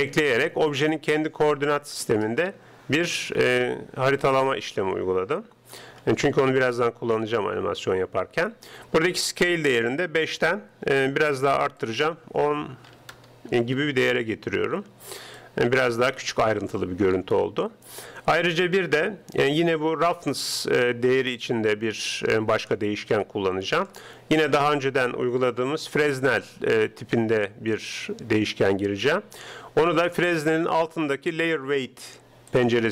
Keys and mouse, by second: 0.9-2.7 middle drag, 3.3-4.8 middle drag, 4.8 click, 5.0-6.5 middle drag, 11.8-13.6 drag, 15.4-17.3 middle drag, 21.3 click, 24.7 shift+a.